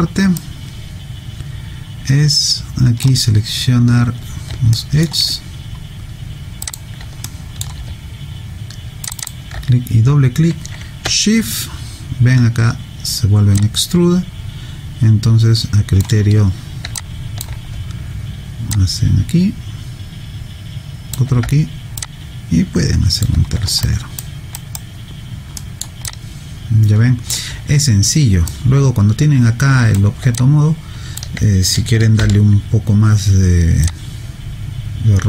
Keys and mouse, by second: 0.4 right click, 4.8 alt+middle click, 6.7 click, 7.3 alt+middle click, 9.1 shift+click, 9.2 shift+click, 13.6 shift+click, 17.0 alt+click, 18.7 shift+click, 22.0 shift+click, 23.9 alt+right click, 24.6 alt+right click, 25.6 alt+middle click, 26.1 alt+click, 28.5 right click, 30.4 alt+click, 32.2 r, 33.9 click.